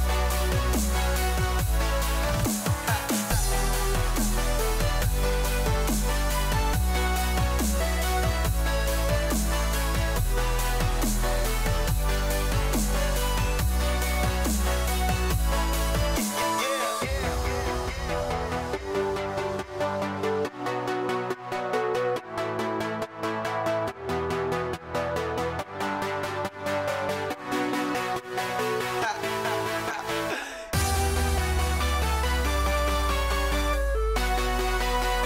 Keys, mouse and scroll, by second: 9.0-9.8 scroll down 1, 9.8 middle click, 10.7 a, 11.7-13.0 middle drag, 13.0 KP_4, 16.1 z, 17.9-20.0 scroll up 3, 20.0 shift+a, 22.3 g, 25.0 s, 29.0 r.